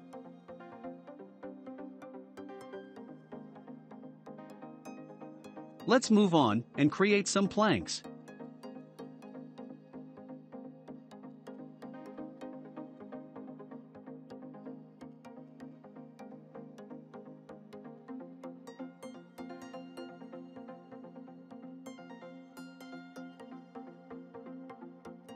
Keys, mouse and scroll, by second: 0.2-3.4 shift+middle drag, 3.4 click, 5.0-6.3 middle drag, 6.3 click, 6.8 scroll down 1, 7.3-8.3 shift+middle drag, 8.3 shift+d, 10.4-12.0 shift+middle drag, 12.0 scroll up 1, 12.7 s, 15.9 s, 19.7 s, 23.1 shift+middle click, 23.6-24.6 scroll up 2, 24.6 click.